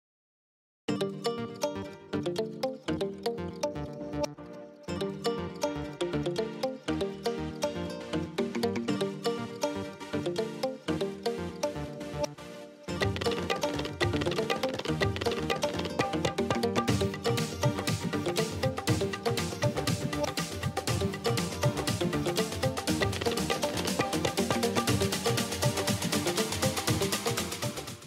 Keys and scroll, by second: 0.4 b, 1.9 \, 7.6 b, 8.5 \, 12.6 b, 13.8 \.